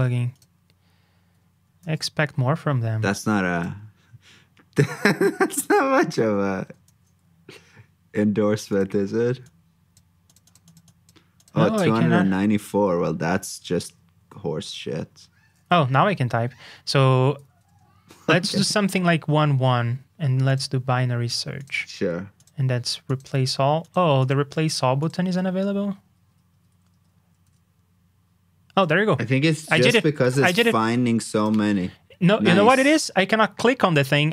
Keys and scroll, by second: 1.8 super+f.